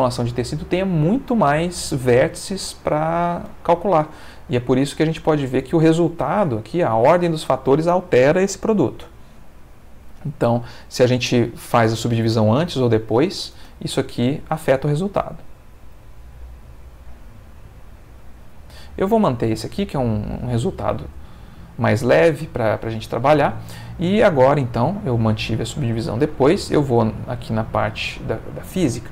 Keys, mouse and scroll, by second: 9.6 Escape, 11.8-13.3 drag, 13.6 space, 19.6 middle click, 20.7-22.5 ctrl+middle drag, 23.5 middle click, 26.9 click, 27.8 middle click, 28.6 middle click.